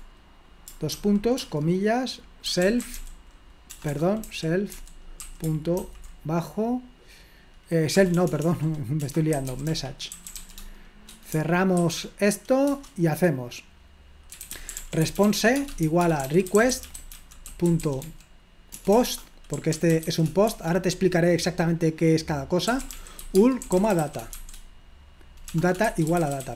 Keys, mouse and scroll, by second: 2.3-5.8 typing, 8.2-11.8 typing, 12.7 Return, 14.1-20.5 typing, 22.4-26.5 typing.